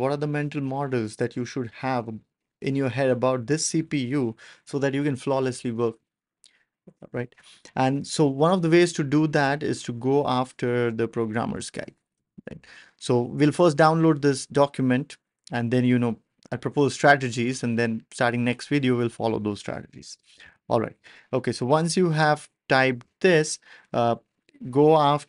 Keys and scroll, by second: 20.4 BackSpace.